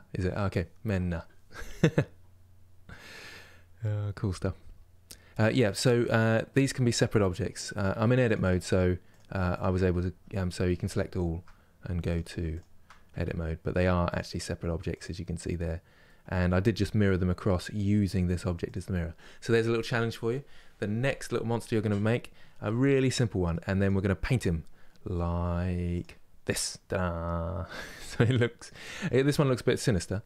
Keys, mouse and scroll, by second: 7.6 Tab, 8.8 click, 10.6 shift+click, 11.8 shift+click, 12.9 Tab, 13.4 Tab, 13.8 click, 14.6 click, 15.7-17.5 middle drag, 17.5 click, 18.4 click, 18.9-20.9 middle drag, 20.9-21.3 scroll down 2, 21.3-23.5 middle drag, 23.5 click, 25.7 click, 26.4-29.3 middle drag, 29.3-29.8 scroll up 2, 29.8-30.2 middle drag.